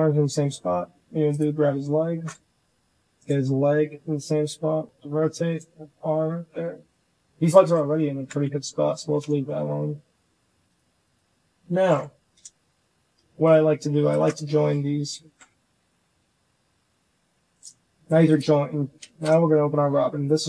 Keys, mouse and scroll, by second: 1.5 shift+click, 2.0 shift+middle drag, 2.4 r, 3.4 r, 4.6 r, 5.9 r, 7.1 shift+middle click, 7.9 ctrl+z, 8.5 shift+right click, 9.2 shift+click, 10.6 click, 12.2 j, 12.2 h, 12.8 shift+drag, 15.0 ctrl+j, 15.5 g.